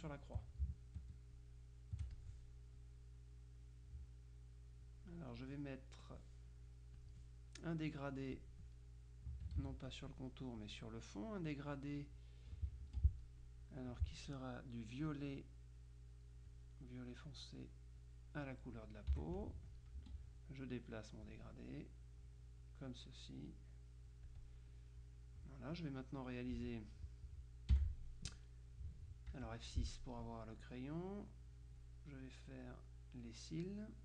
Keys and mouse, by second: 0.2 shift+click, 1.5 click, 2.3 click, 3.2-5.3 drag, 7.1 click, 8.4 click, 9.7 ctrl+z, 10.1 ctrl+click, 12.9 F2, 13.5 click, 15.1-16.3 drag, 16.5-17.7 drag, 18.1 click, 19.2 F7, 19.4 click, 20.1 F2, 20.4-21.7 drag, 22.1-23.4 drag, 23.6-25.1 drag, 27.9 F7, 29.5 F6, 30.7-32.4 drag, 32.6 click, 33.4 click.